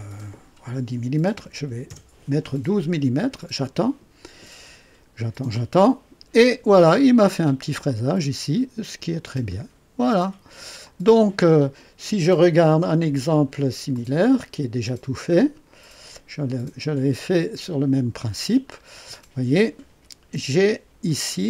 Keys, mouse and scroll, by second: 1.3 KP_1, 1.5 KP_2, 1.8 KP_Enter, 7.3-7.7 scroll up 2, 7.8-10.6 drag, 10.8 click, 12.5 click, 13.9-17.4 drag, 18.6 scroll up 1, 20.5 KP_1, 21.1 scroll up 1.